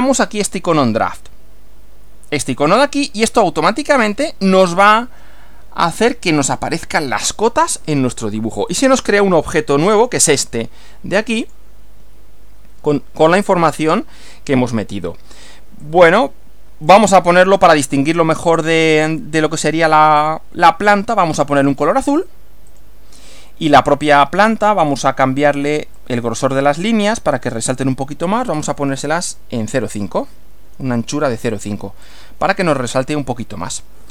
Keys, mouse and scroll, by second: 0.6 click, 3.7 click, 8.7-9.3 drag, 10.0 click, 11.5 click, 15.9-17.1 drag, 19.6 click, 20.2 click, 21.7 click, 22.7 click, 24.8 click, 26.0-26.7 drag, 27.4 click, 28.4-29.6 drag, 30.4-31.5 typing, 32.0 click.